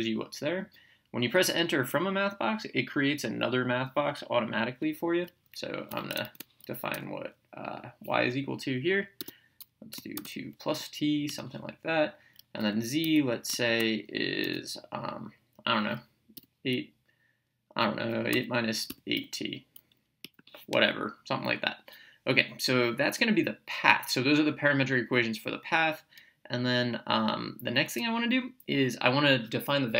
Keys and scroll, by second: 5.9 y, 6.9 =, 9.2 2, 10.7 t, 11.2 Return, 13.0 z, 14.4 =, 16.3 8, 18.3 -, 18.9 8, 19.2 t, 20.2 Return, 27.8 BackSpace.